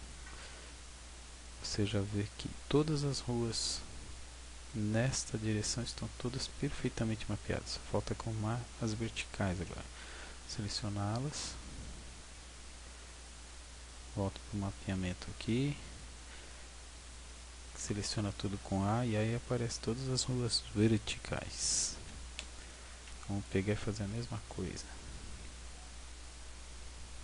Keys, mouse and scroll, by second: 0.1 scroll up 4, 6.1-6.4 scroll down 2, 7.0 scroll up 2, 10.0 right click, 10.6 Tab, 11.1-11.8 scroll down 5, 12.4 scroll down 2, 14.9 click, 17.7 a, 19.4 scroll down 1, 22.0 a, 23.0 b, 25.4 g.